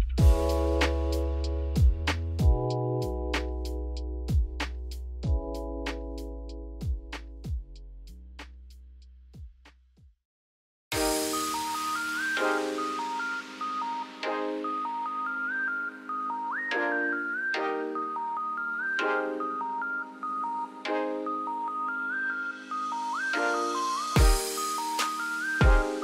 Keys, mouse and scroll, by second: 0.1 n, 0.4 scroll up 3, 0.7 middle drag, 1.0 click, 1.2 Tab, 1.7 a, 3.5 scroll up 1, 3.7 shift+middle click, 4.1 Tab, 4.4-5.3 middle drag, 5.3 Tab, 6.0 scroll up 1, 6.9 s, 11.7-12.6 scroll up 1, 12.6 shift+middle click, 13.1 scroll down 2, 13.3 middle click, 13.6 s, 14.9 s, 17.7 scroll down 1, 17.7 middle click, 19.4 scroll up 1, 20.7 g, 23.7-24.1 scroll down 3, 24.1 g, 25.5 scroll down 2, 25.6 middle click, 25.9-26.0 scroll up 4.